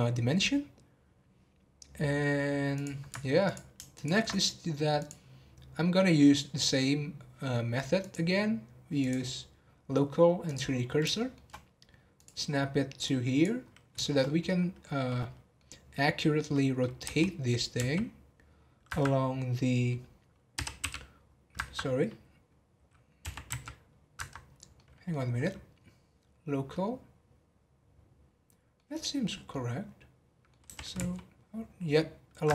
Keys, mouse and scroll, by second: 1.8 scroll down 1, 2.7 click, 3.9 alt+shift+click, 5.0-11.0 drag, 11.1-12.1 shift+middle drag, 12.1 click, 12.4-13.0 scroll up 1, 13.0 click, 13.6-14.0 scroll down 4, 14.0 shift+middle click, 14.5 scroll up 2, 14.8-17.0 middle drag, 17.0 r, 23.2 r, 24.4 scroll down 4, 24.7-25.3 middle drag, 25.3 scroll up 1, 26.0-26.5 scroll down 2, 26.7-30.6 middle drag, 30.6 r.